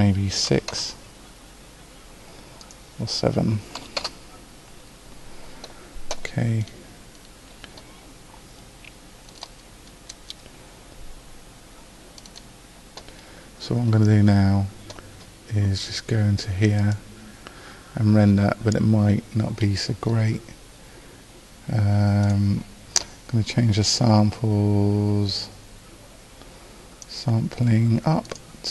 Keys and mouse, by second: 6.8 middle click, 22.5-25.8 drag, 28.5-28.7 drag.